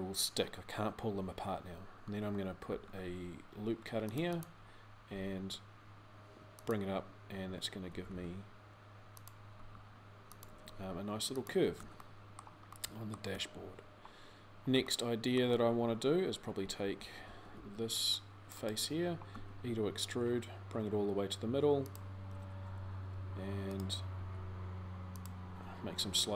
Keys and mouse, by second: 2.4 ctrl+r, 4.9 g, 7.6 g, 9.4 r, 10.3 g, 12.6 click, 16.4 a, 16.8 a, 17.3 c, 19.2 e, 23.9 g.